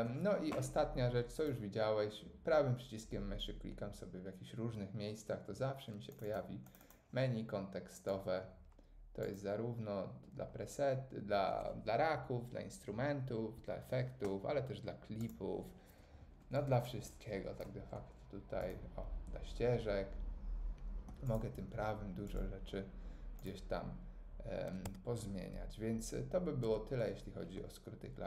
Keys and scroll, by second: 24.8 Tab, 25.9 Tab, 26.6 Tab.